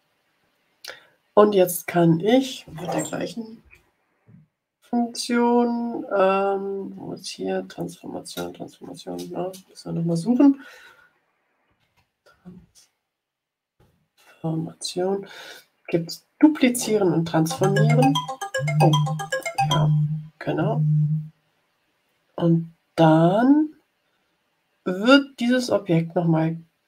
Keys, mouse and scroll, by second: 5.3-5.7 scroll down 2, 6.1-6.5 scroll up 2, 6.8-7.1 scroll down 2, 7.4-8.5 scroll down 6, 10.4-13.0 typing, 15.0-15.6 scroll down 2, 19.2 click.